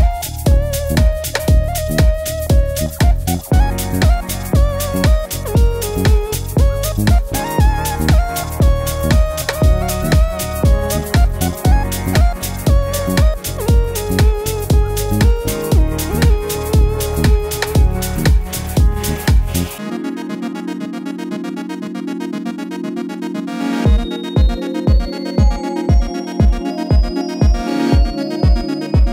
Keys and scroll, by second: 4.2 Up, 4.4 Left, 4.5 Left, 4.7 Left, 4.9 Down, 5.0 Up, 12.8 Right, 13.0 Right, 17.3 BackSpace.